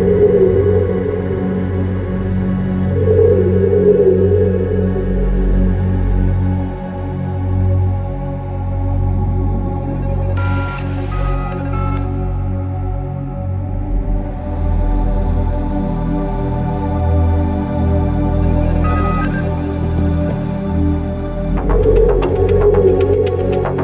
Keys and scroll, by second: 5.7 space, 8.8 space, 9.2 space, 22.2 space.